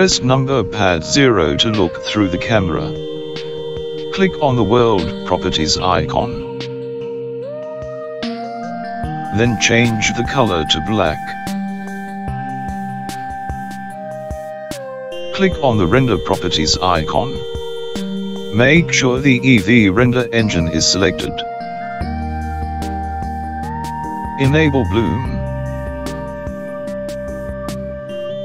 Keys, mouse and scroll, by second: 3.1 KP_0, 8.1 click, 11.8 click, 18.9 click, 26.3 click.